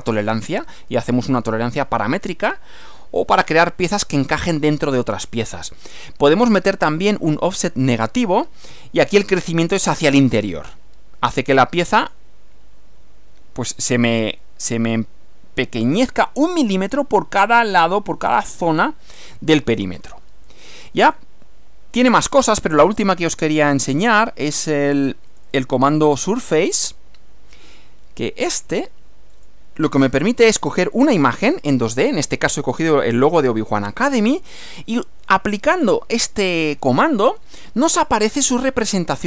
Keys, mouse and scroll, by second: 7.4 click, 8.7 -, 12.0 click, 21.1 click, 22.0 click, 25.3 click, 29.3 click, 31.4-32.9 drag, 38.3-39.2 drag.